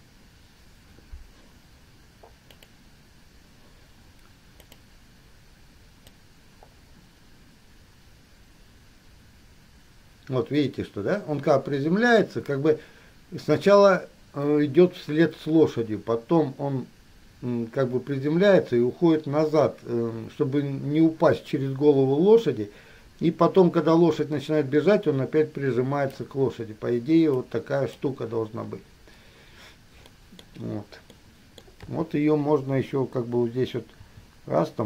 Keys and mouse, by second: 2.9 click, 4.9 click, 6.2-15.5 drag, 26.5-27.5 middle drag, 28.2-30.4 middle drag, 32.0-33.1 middle drag, 32.0 KP_3, 34.2 r.